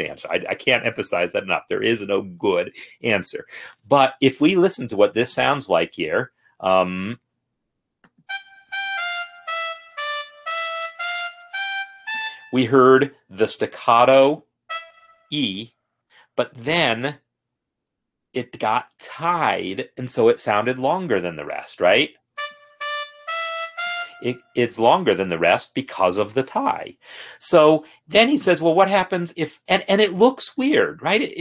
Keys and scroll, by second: 8.9 space, 12.2 space, 22.6 space.